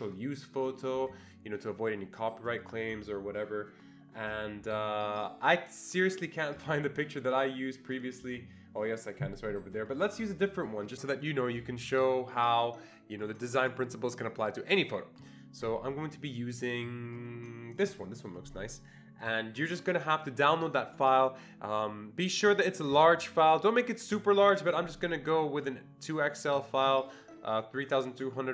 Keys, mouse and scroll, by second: 17.8 click, 21.1 click, 26.3-28.5 click.